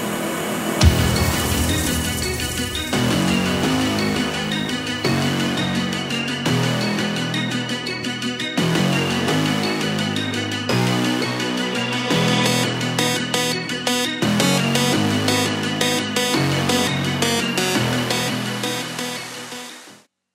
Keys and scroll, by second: 0.6-1.4 typing.